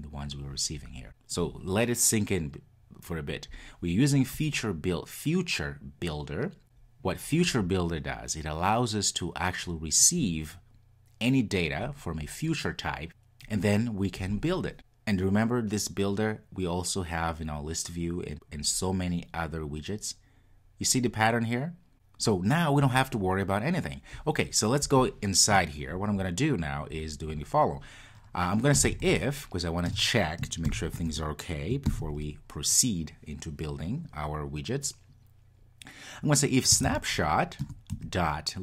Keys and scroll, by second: 37.7 Return.